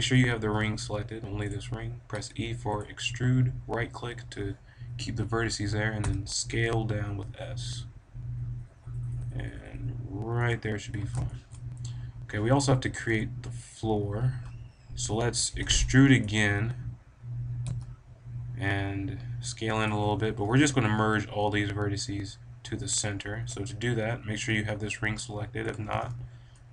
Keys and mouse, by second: 1.5 click, 2.0 e, 2.7 middle click, 3.1-4.6 right drag, 5.9 s, 10.4-13.1 drag, 15.6 e, 16.2-18.1 right drag, 17.7 s, 19.8-21.7 drag, 21.7 middle click, 25.6 a, 25.7 b.